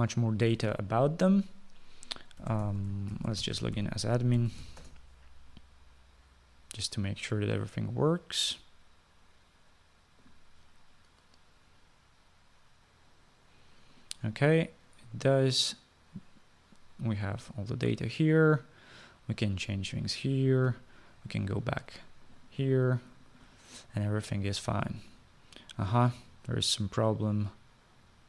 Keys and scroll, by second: 3.7-5.9 typing, 6.0 Return.